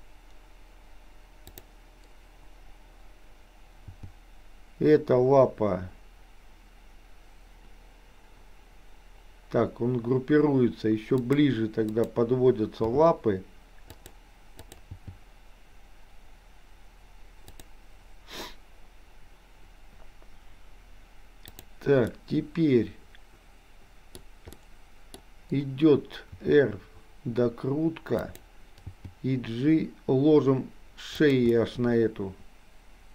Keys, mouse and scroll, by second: 1.5 click, 3.9 g, 11.9 click, 12.9 g, 14.7 click, 14.9 g, 21.7 drag, 22.2-24.2 middle drag, 24.5-25.3 middle drag, 26.4 r, 28.8 g, 31.5-33.1 middle drag.